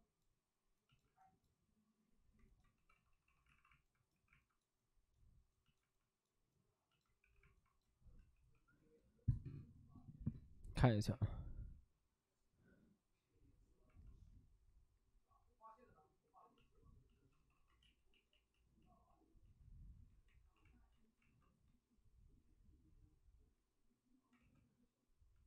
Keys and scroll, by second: 2.7-4.1 typing, 3.4 alt+s, 9.0 2, 17.1 shift+d, 17.5 shift+d, 17.8 ctrl+z, 18.0 ctrl+z, 20.3 ctrl+z, 20.3 2, 21.2 alt+s, 24.3 w, 24.8 w.